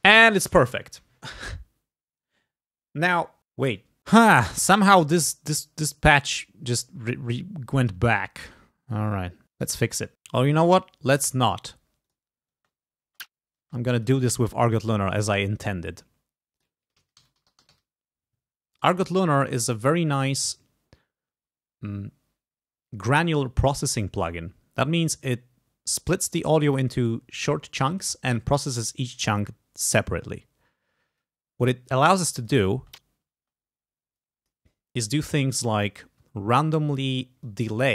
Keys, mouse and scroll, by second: 0.6 click, 3.6 scroll down 2, 6.4 click, 11.1 right click, 12.1 click, 12.6 space, 14.0 click, 14.9 click, 15.7 right click, 16.6 click, 16.8-18.3 typing, 18.8 click, 19.6 click, 31.3-32.7 drag, 32.8 space, 34.2 click, 37.5-37.9 drag.